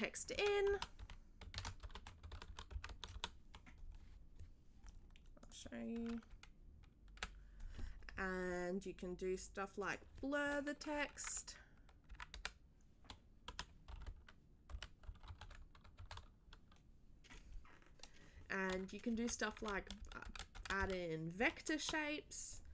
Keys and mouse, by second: 0.7-2.2 typing, 5.4 click, 9.8 click, 15.2 r, 15.9 1.